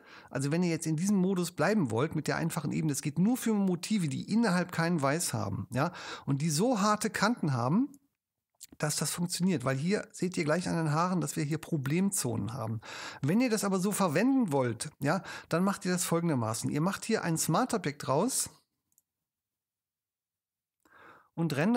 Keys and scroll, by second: 7.7 super+space, 11.5 super+0.